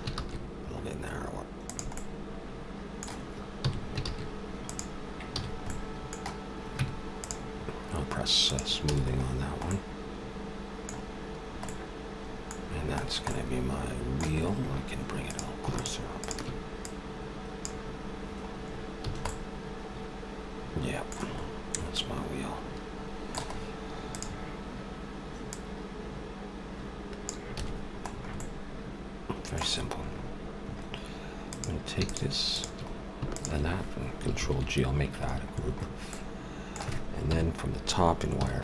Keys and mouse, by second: 3.6 s, 5.4 a, 5.4 middle click, 6.8 Tab, 8.5-10.2 drag, 8.9 a, 12.4 middle click, 12.7-15.3 middle drag, 15.3-18.7 drag, 18.5 middle click, 19.1 a, 24.0 middle click, 24.2-27.3 drag, 27.6 a, 30.2 middle click, 31.5-34.8 drag, 34.4 ctrl+g, 35.2-37.1 middle drag, 37.2 KP_7, 37.4 middle click, 38.4 z.